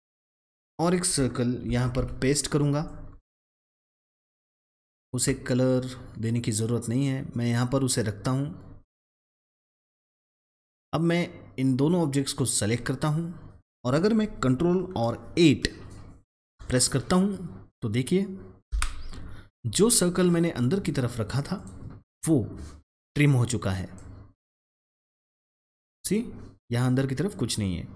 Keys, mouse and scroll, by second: 1.6 ctrl+c, 1.9 ctrl+v, 2.8 click, 3.9-18.6 drag, 18.6 ctrl+8, 21.4 click, 23.8-27.9 drag.